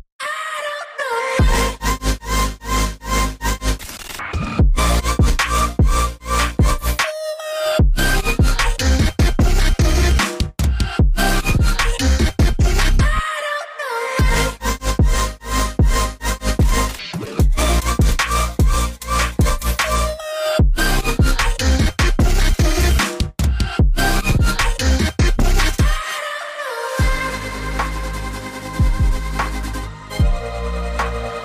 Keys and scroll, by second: 10.2-10.7 scroll, 23.7 ctrl+c, 28.5 ctrl+f.